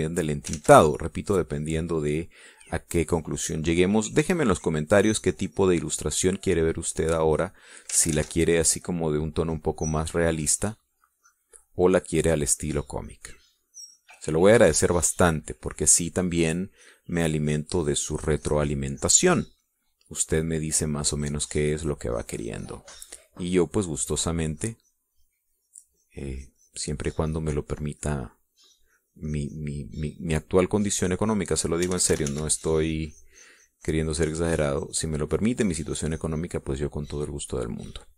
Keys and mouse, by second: 2.1 ctrl+z, 2.7 ctrl+click, 4.1-7.2 drag, 7.4 click, 8.3-9.5 drag, 9.5 ctrl+z, 10.0-15.2 ctrl+drag, 16.0 middle click, 16.8 middle click, 17.8 click, 19.3-20.8 drag, 20.9 middle click, 22.3-25.0 drag, 25.4-32.1 drag, 32.3-33.4 drag, 33.5 ctrl+z, 34.4-38.1 ctrl+drag.